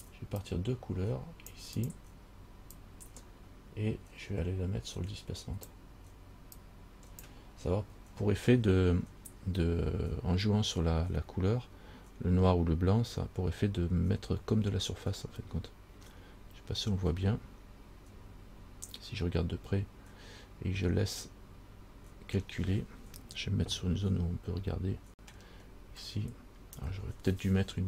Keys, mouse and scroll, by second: 0.6 click, 2.0 click, 3.0 click, 6.8 click, 6.9 click, 15.4 scroll up 1, 16.5 scroll up 1, 18.4 scroll up 3, 24.1 shift+middle click, 26.0 scroll up 2.